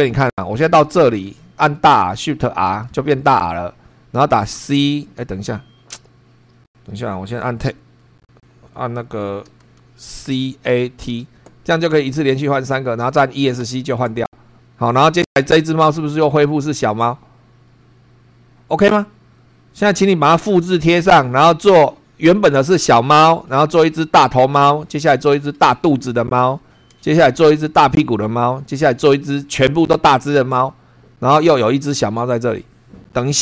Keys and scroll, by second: 0.0 super+3, 0.5 super+Down, 1.2 super+Left, 2.6 shift+r, 4.5 c, 10.0 shift+c, 10.5 shift+a, 11.0 shift+t, 13.6 Escape, 14.9 Down, 15.8 Left, 19.5 Up, 21.0 Down, 21.9 Right, 22.7 Left, 23.3 Down, 24.2 Right, 24.6 Left, 24.8 Down, 25.7 Right, 27.7 Right, 28.4 Down, 29.3 Left, 29.9 Right, 31.4 Down, 32.0 Right.